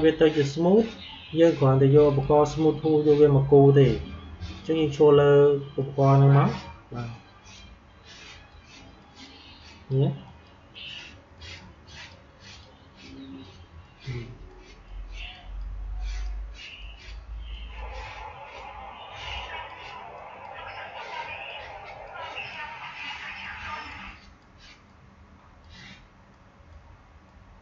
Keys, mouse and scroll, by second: 2.0 click, 4.5-27.6 drag.